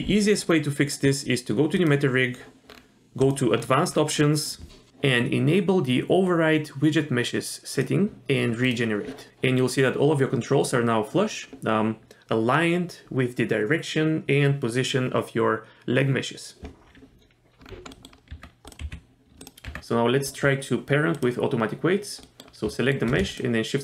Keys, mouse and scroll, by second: 1.8 click, 2.7 scroll down 1, 3.2 click, 3.6-4.9 scroll down 3, 4.9 click, 7.7 click, 8.6 click, 17.7 scroll down 1, 17.9 middle click, 18.3 Tab, 18.7 click, 18.8 g, 19.6 Tab, 21.1 click, 22.2 middle click, 22.7 shift+middle drag, 23.3 shift+click.